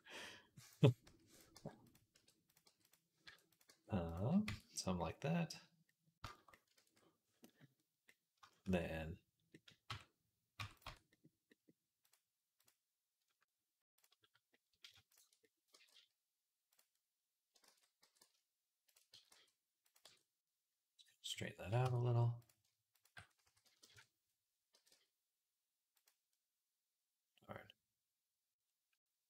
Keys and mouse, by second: 0.8-3.5 middle drag, 0.9-3.5 typing, 3.5-4.5 drag, 4.3 Tab, 4.6 click, 4.8-5.9 middle drag, 5.9-7.9 shift+drag, 6.6 ctrl+s, 7.9-10.7 middle drag, 9.7 Tab, 10.4 Tab, 10.7 Tab, 10.7-13.1 drag, 13.7 ctrl+click, 13.9-15.6 middle drag, 15.6-19.0 drag, 15.6 g, 17.5 ctrl+z, 17.9 g, 19.0 s, 19.9 Tab, 21.7 Tab, 23.3 s, 24.6 g, 27.6-29.2 drag.